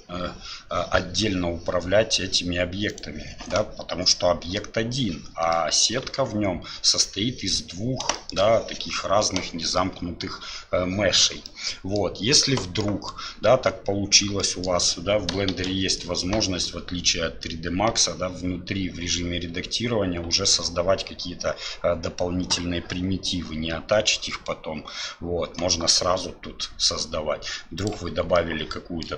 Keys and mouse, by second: 5.6 middle click, 8.1 shift+click, 11.5 click, 12.8 click, 14.4 middle click, 15.5 shift+a, 28.3 middle click.